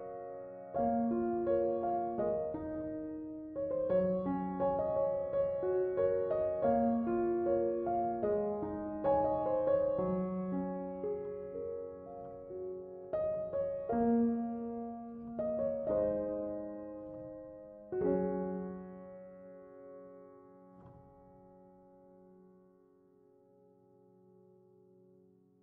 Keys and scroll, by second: 14.2 space.